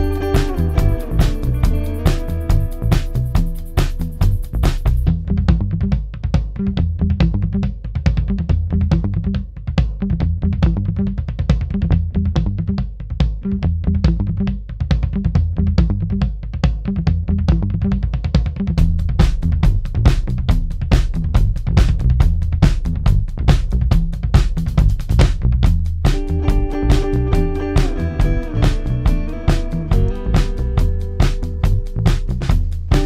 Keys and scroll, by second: 5.7 F1, 14.3 3, 14.9 shift+f, 16.0 ctrl+z, 16.3 ], 22.7 4, 24.2 3, 24.7 ], 25.1 ], 27.2 ], 27.6 ctrl+d, 27.6 Escape, 29.2 ], 29.8 ], 31.0 4.